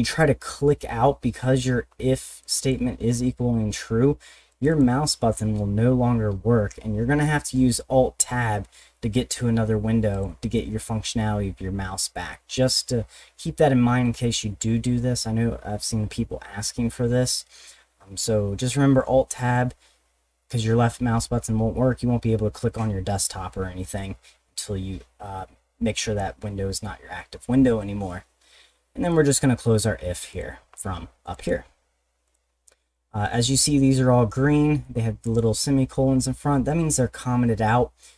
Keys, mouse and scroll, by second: 1.8 middle click, 2.4 click, 3.6 middle click, 4.5 click, 4.7 click, 10.1 click, 29.1 click, 30.3 click, 30.7 middle click, 31.2 click, 31.4 click, 32.3 click, 32.6 middle click, 34.8 click, 37.8 middle click.